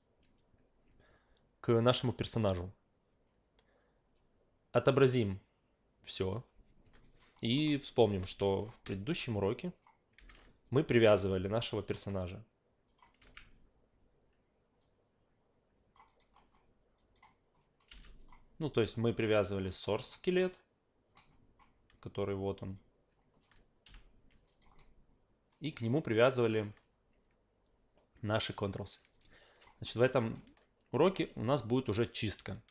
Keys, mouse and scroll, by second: 4.8 click, 6.2 click, 7.0 alt+right click, 7.4 alt+middle click, 8.0 alt+right click, 8.2 alt+click, 9.7 click, 10.2 f, 10.6 alt+right click, 11.2 alt+middle click, 11.4 alt+right click, 12.9 click, 14.8 alt+click, 15.9 alt+click, 16.2 alt+right click, 16.3 alt+middle click, 17.0 alt+right click, 17.4 alt+middle click, 18.2 click, 19.6 click, 19.9 alt+right click, 20.3 alt+click, 21.1 alt+middle click, 22.7 click, 23.2 alt+middle click, 23.8 Up, 24.5 alt+right click, 24.7-25.5 alt+middle drag, 25.7 alt+right click, 26.4 alt+middle click, 28.8 click, 29.1-29.6 alt+right drag, 29.8 alt+middle click, 31.2-32.7 alt+right drag.